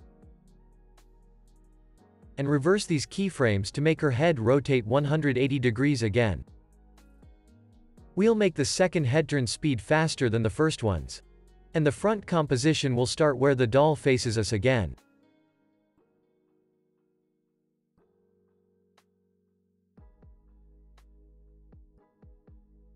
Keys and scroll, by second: 0.9 u, 10.5 alt+], 14.7 z, 15.7 alt+], 21.1 x.